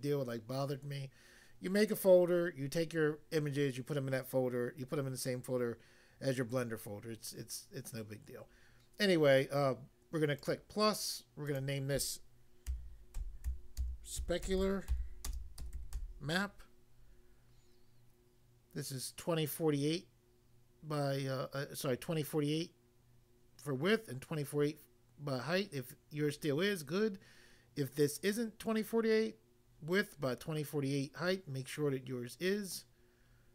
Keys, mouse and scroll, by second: 10.4 click, 10.5 click, 11.5 click, 12.7-16.2 typing.